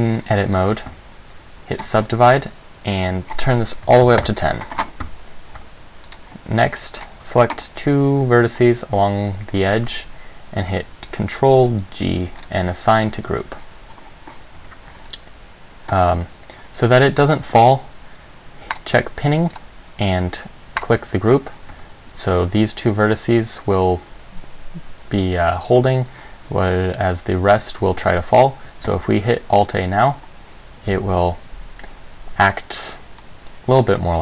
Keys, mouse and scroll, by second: 1.1 a, 2.0 click, 4.2 click, 5.2 Tab, 5.8 Tab, 6.2 right click, 7.2 shift+right click, 11.8 ctrl+g, 14.8 Tab, 18.9 click, 19.7 click, 21.8 Tab, 28.2 Tab, 29.1 alt+a, 33.4 middle click.